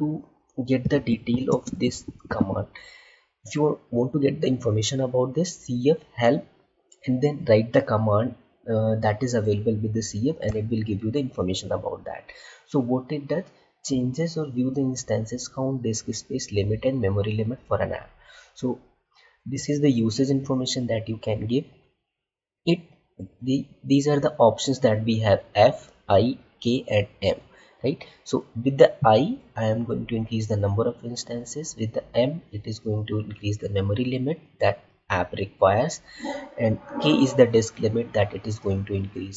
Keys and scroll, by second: 1.4 space.